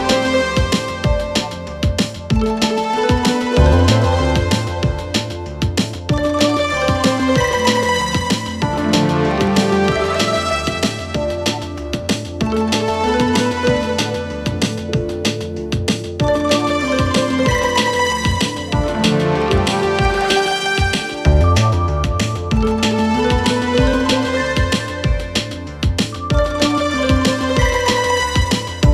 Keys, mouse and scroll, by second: 3.1-4.8 typing, 5.8-10.1 click, 11.3 s, 12.0-14.6 click, 15.6 Return, 17.1 click.